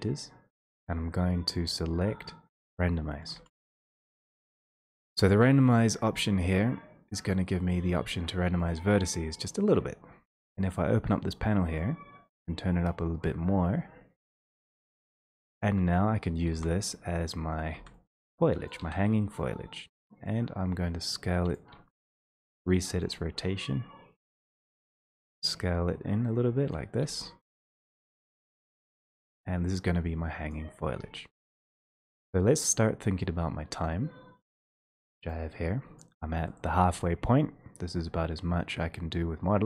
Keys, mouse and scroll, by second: 2.8-3.4 scroll, 3.3 a, 4.1-5.0 scroll, 5.0 scroll, 8.8 click, 16.2 1, 17.8 e, 18.8 click, 19.1 r, 21.6 click, 22.1 ctrl+z, 23.1 click, 26.7 click, 27.7 w, 30.6 click, 36.2-39.6 drag.